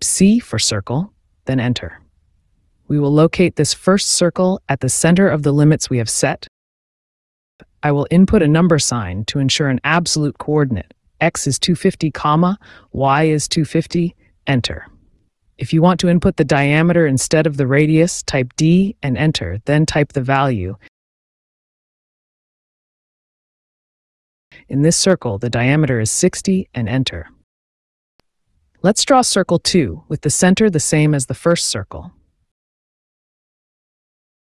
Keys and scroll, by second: 5.1 shift+#, 7.0 KP_5, 7.2 KP_0, 8.3 BackSpace, 9.5 KP_2, 9.7 KP_5, 9.9 KP_0, 10.9 ,, 11.9 KP_2, 12.1 KP_5, 12.2 KP_0, 13.0 Return, 17.5 d, 21.3 space, 25.2 KP_6, 25.5 KP_0, 28.5 Return, 32.2 c, 33.9 space.